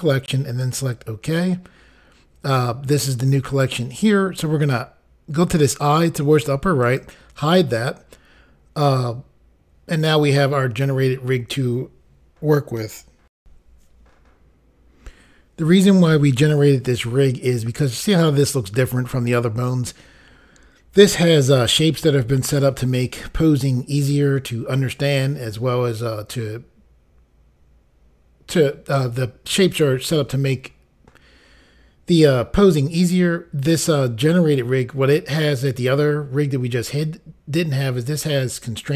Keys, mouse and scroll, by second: 0.6 click, 6.8 click, 13.3 Insert, 14.5 Pause.